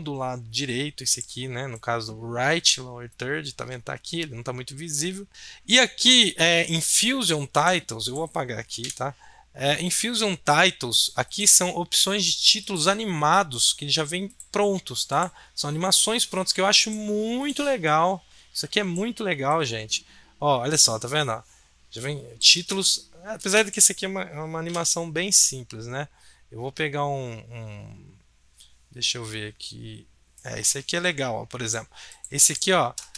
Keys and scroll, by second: 8.8 BackSpace, 24.6 BackSpace.